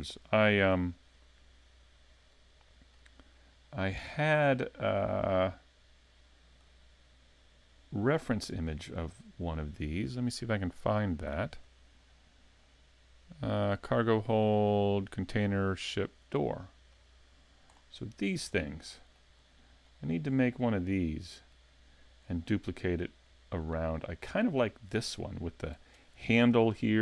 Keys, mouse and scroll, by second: 3.0 click, 6.6 click, 17.0 click, 17.8-19.4 scroll up 8, 18.6 middle click, 19.4-20.2 scroll up 2, 19.9 middle click, 20.7-21.1 scroll down 3, 21.1 middle click, 22.2-22.6 scroll up 1, 22.6 scroll down 2, 23.2 scroll up 2, 23.9 middle click.